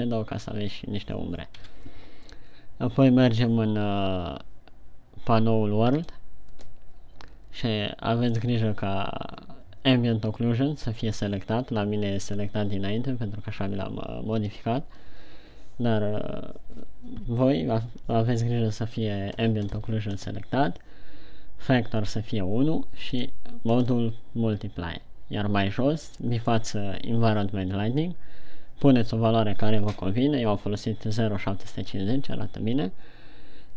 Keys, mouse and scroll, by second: 0.3 click, 2.0 KP_1, 6.4 click, 23.5 click.